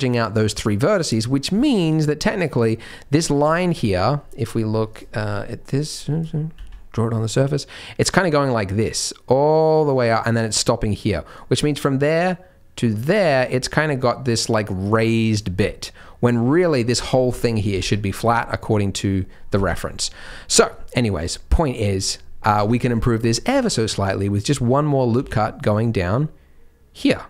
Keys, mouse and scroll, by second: 0.0 middle click, 0.7 middle click, 1.3 scroll down 1, 1.5 middle click, 2.3 middle click, 2.9 middle click, 3.4 Tab, 4.9 click, 5.6 click, 6.5 z, 8.3 click, 11.3 click, 11.9 click, 14.0 click, 14.4 click, 14.8 click, 15.1 click, 15.6 middle click, 17.3 middle click, 19.8-20.3 scroll down 3, 20.2-21.1 scroll up 3, 21.1 d, 21.2 right click, 22.5 d, 22.6 Tab, 22.8-23.5 scroll down 3, 23.1 middle click, 23.5 z, 24.6-25.2 scroll up 2, 25.2 ctrl+r.